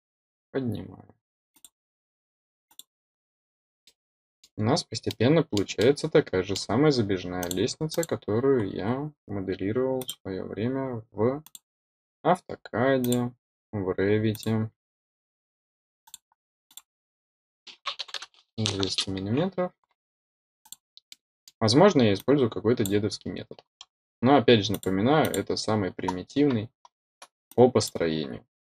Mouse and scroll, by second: 1.5 click, 2.6 click, 3.2-3.8 scroll down 2, 3.8 middle click, 4.8 scroll up 2, 5.0 middle click, 5.7 middle click, 7.3 click, 7.8 click, 8.5-9.1 scroll up 1, 9.1 scroll up 1, 9.9 click, 11.4 click, 12.9 click, 14.2 click, 16.0 click, 16.6 click, 20.5 click, 21.0-21.4 middle drag, 22.1-22.8 drag, 24.6 click, 25.1 click, 27.4-27.8 drag.